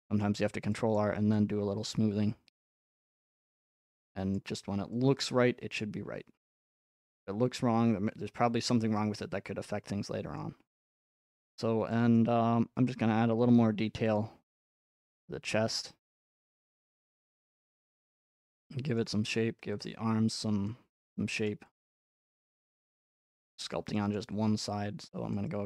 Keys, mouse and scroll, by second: 0.9-1.4 scroll up 1, 1.9 click, 2.3 scroll up 1, 3.0 scroll up 5, 4.3-4.8 scroll up 5, 5.8-6.5 scroll up 5, 10.4-11.1 scroll up 5, 11.4-11.9 scroll up 6, 12.2 shift+middle click, 14.2 click, 17.8 click, 19.0 middle click, 19.3 middle click, 20.7 click, 21.5 shift+middle click, 22.6 click, 23.3 middle click, 23.4-24.3 scroll up 5, 23.7 shift+middle click, 25.4 click.